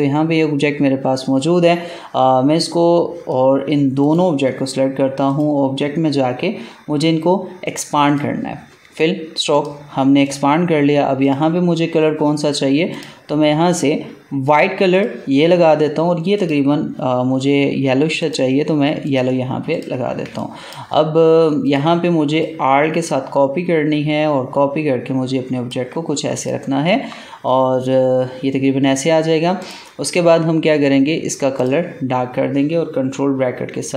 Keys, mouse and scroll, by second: 8.0 click, 20.2 space, 20.3 click, 20.7 space, 21.5-26.3 drag, 29.5 click, 33.0 ctrl+[.